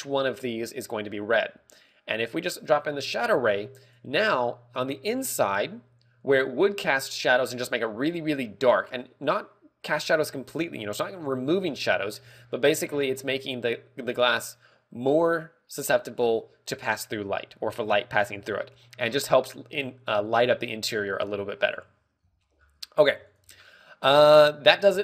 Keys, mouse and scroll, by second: 1.4 middle click, 2.7 click, 11.0 middle click, 21.4 scroll down 4, 21.7 z, 21.9 middle click, 22.2 KP_1, 22.4 scroll down 1, 22.7 z, 23.1 scroll down 1, 23.5 ctrl+w, 24.2 scroll up 1, 24.8 scroll up 3.